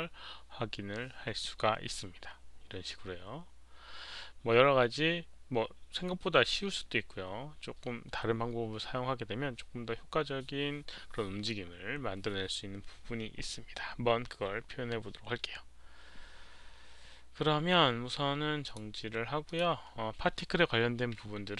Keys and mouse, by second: 18.6 click, 19.3 click.